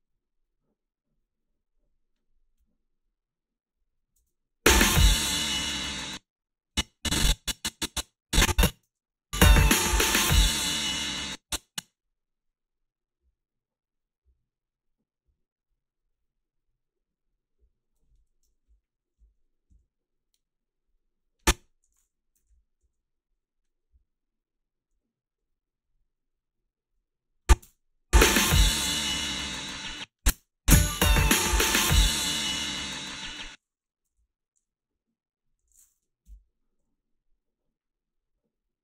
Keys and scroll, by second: 4.2 space, 5.9 space, 8.9 space, 11.0 space, 19.2 Down, 19.7 Down, 22.5 -, 27.6 space, 29.7 space, 30.3 space, 33.2 space, 34.1 =, 34.2 =, 36.3 Delete.